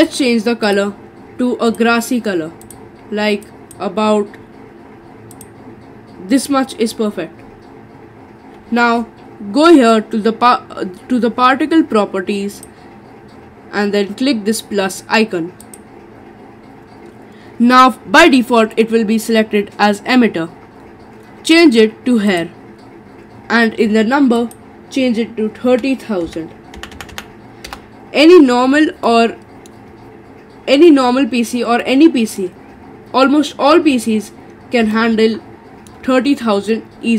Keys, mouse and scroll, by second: 12.5 click, 15.6-18.7 drag, 22.3 click, 24.4-26.9 drag, 26.9 0, 27.1 0, 29.1 middle click, 30.0-31.2 scroll up 10, 31.8 middle click, 32.7-33.3 scroll down 4, 33.3-34.9 scroll down 7, 34.9-37.1 middle drag.